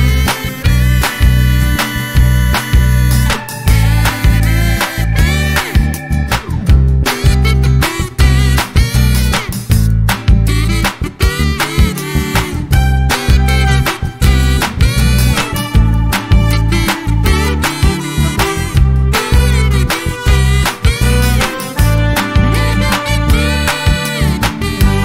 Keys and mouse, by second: 0.0 click, 2.6-3.5 drag, 5.2 click, 6.4 click, 18.1-18.9 drag, 19.1 space, 19.8 click, 20.2 space, 22.0 click, 24.7 click.